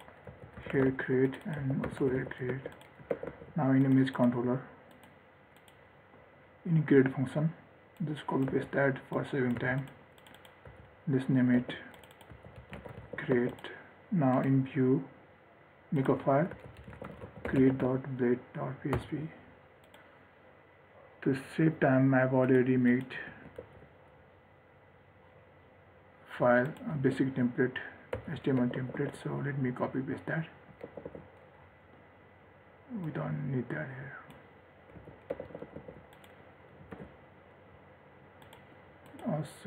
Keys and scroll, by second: 2.7 ctrl+s, 8.7 ctrl+c, 9.8 ctrl+v, 11.8 ctrl+z, 13.6 ctrl+s, 23.5 ctrl+a, 23.8 ctrl+c, 27.2 ctrl+a, 28.3 ctrl+v, 28.8 ctrl+s, 35.2 ctrl+x, 35.7 ctrl+s, 37.1 ctrl+r.